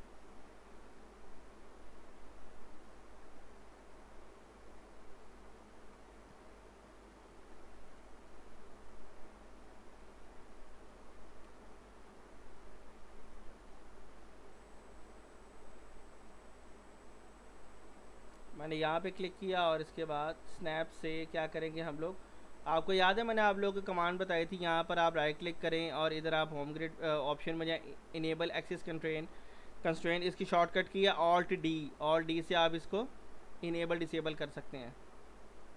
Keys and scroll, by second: 14.9 w, 19.9 s, 22.8 ctrl+z, 31.7 alt+d, 35.0 s.